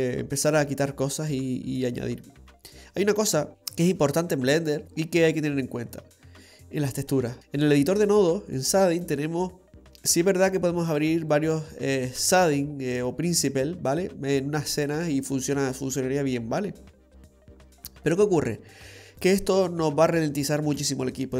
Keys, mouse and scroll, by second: 0.9 scroll up 1, 2.2 scroll down 1, 2.5-3.0 scroll down 3, 3.2-4.5 scroll down 4, 5.7-6.5 scroll down 3, 6.5 middle click, 6.5-7.4 scroll down 1, 9.8 click, 9.8-11.1 scroll up 3, 11.4 click, 13.2-14.4 scroll up 5, 14.4-15.2 scroll up 2, 17.2-17.5 scroll down 5, 20.6 scroll down 2.